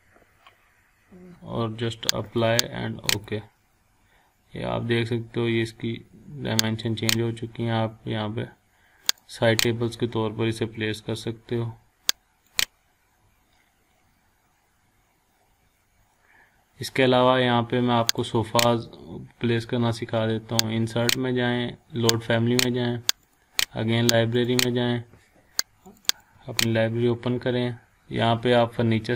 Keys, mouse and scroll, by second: 2.3 click, 6.7 click, 9.1 click, 9.5 click, 12.5 click, 14.0 scroll down 1, 15.3 scroll up 1, 15.6 scroll down 1, 16.2 scroll up 1, 18.1 click, 21.0 click, 28.8 f.